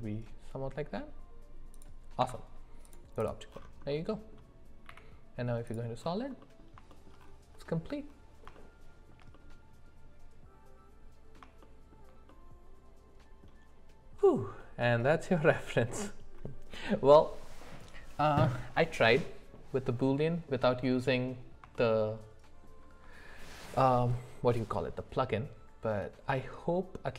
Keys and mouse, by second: 2.2 Tab, 3.9 middle click, 4.9 z, 6.4 middle click, 6.9 shift+middle click, 8.5 shift+middle click, 9.3-11.4 middle drag, 11.6 shift+middle click, 12.3-13.5 middle drag, 21.8 shift+middle click.